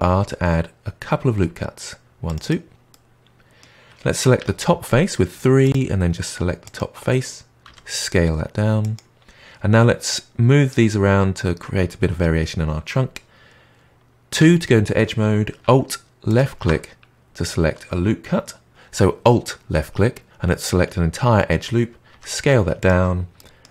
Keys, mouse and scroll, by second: 2.8-4.3 middle drag, 4.3 3, 5.6 click, 6.6 click, 7.6 s, 14.3 2, 16.2 alt+click, 22.0 s, 23.3 middle click.